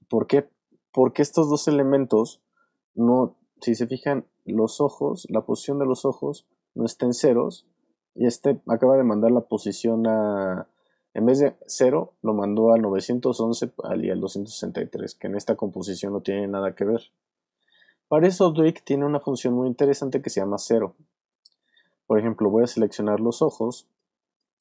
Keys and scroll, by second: 21.1 super+z.